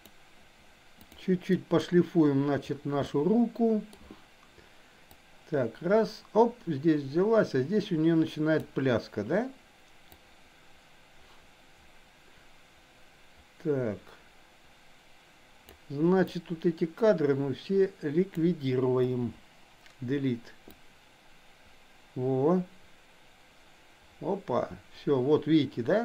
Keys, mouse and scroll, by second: 0.1 drag, 1.0 click, 1.5 middle drag, 3.2 middle click, 5.2-8.7 drag, 10.1-15.7 drag, 16.2-18.4 drag, 19.0 Delete, 20.9-26.0 drag.